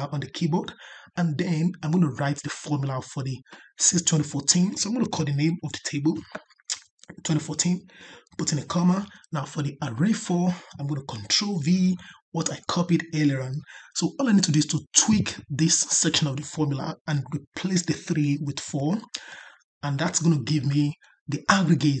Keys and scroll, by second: 11.5 ctrl+v.